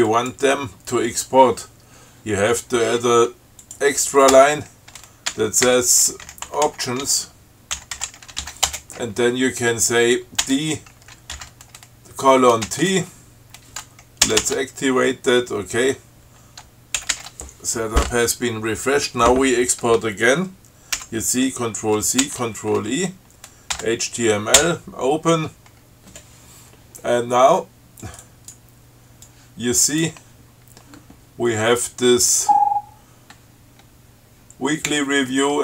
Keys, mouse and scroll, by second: 0.4 click, 3.0-3.4 scroll up 2, 3.9 click, 4.6 Return, 6.3-9.2 typing, 10.7 d, 11.6 shift+., 12.9 t, 14.5 ctrl+c, 17.3 ctrl+x, 17.4 ctrl+s, 21.3 ctrl+c, 22.5 ctrl+e, 24.0 h, 24.9 o, 28.3 click, 29.5 click.